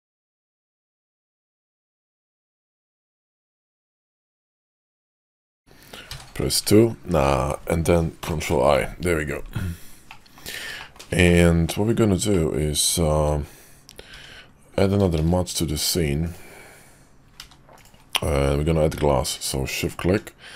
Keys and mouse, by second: 0.4 ctrl+z, 1.0 ctrl+click, 1.4 middle click, 2.1 middle click, 4.5 middle click, 6.0 2, 8.1 ctrl+i, 10.0 middle click, 10.7 middle click, 11.2 middle click, 12.2 middle click, 14.0 Tab, 15.1 shift+a, 17.3 g, 18.9 alt+m.